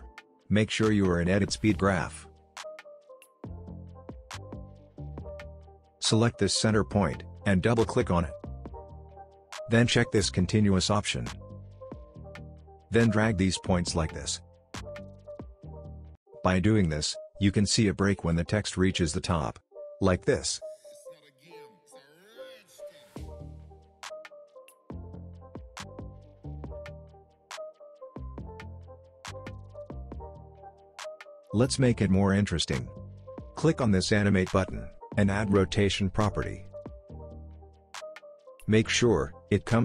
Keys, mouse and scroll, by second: 0.0 right click, 2.9 click, 5.9 ctrl+z, 6.2-16.9 drag, 13.9-14.5 drag, 17.2-17.8 click, 18.0 space, 20.2 click, 21.1 space, 23.1 click, 23.4 space, 25.1-25.8 click, 25.7 space, 32.5 click, 37.5 click.